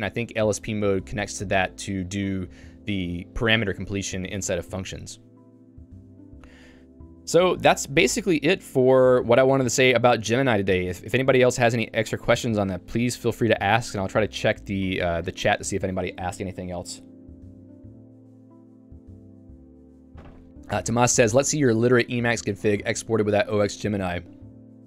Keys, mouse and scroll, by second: 6.6 k, 8.9 Return, 9.5 k.